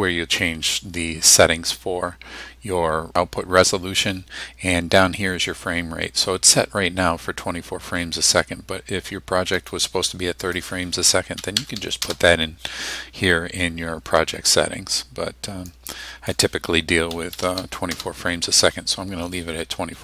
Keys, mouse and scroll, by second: 9.6 click, 10.1-10.8 drag, 11.4 KP_3, 11.6 KP_0, 12.0 KP_Enter, 15.8-16.5 drag, 17.1 KP_2, 17.4 KP_4, 18.0 KP_Enter.